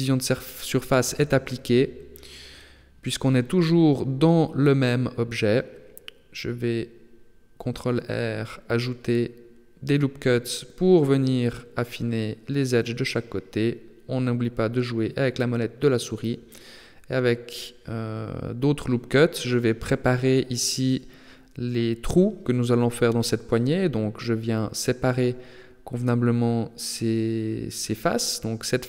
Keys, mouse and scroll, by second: 1.1 s, 6.3 g, 8.7 ctrl+r, 10.9 ctrl+r, 13.5 ctrl+r, 17.5 ctrl+r, 21.0 ctrl+r, 22.9 ctrl+r, 24.2 ctrl+r, 26.5 click, 27.3 right click, 27.7 shift+right click, 28.1 right click, 28.4 shift+right click.